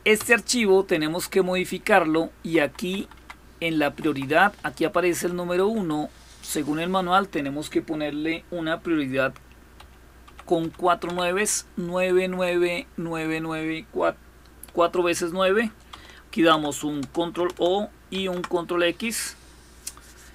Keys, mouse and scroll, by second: 2.1 Down, 2.4 Down, 2.6 Down, 2.7 Down, 2.9 Down, 3.6 Right, 3.8 Right, 4.0 Right, 4.2 Right, 4.4 Right, 4.5 Right, 4.7 Right, 4.9 Right, 5.1 Right, 5.1 typing, 5.3 Right, 5.5 Right, 6.7 Delete, 9.5-10.8 typing, 16.1 ctrl+o, 16.8 Return, 17.9 ctrl+x.